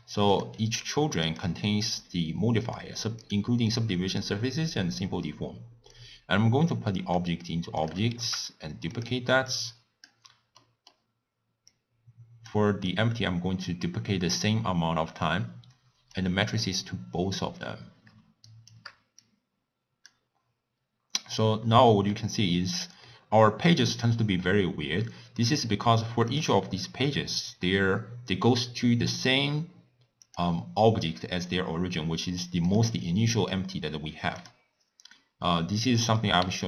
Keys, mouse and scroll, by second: 0.4 click, 7.4-8.4 drag, 8.4 shift+d, 10.3 click, 13.8-17.6 drag, 19.0 shift+right click, 20.3-20.7 drag, 20.7 scroll up 1, 20.8 scroll down 2, 21.1-21.5 scroll up 1, 21.9-22.4 scroll down 4, 23.1-24.0 middle drag, 24.0 click, 25.6 click.